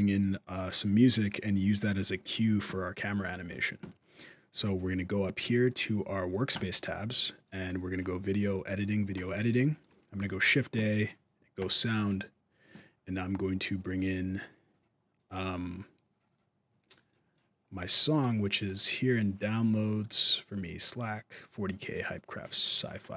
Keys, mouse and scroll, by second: 6.3 click.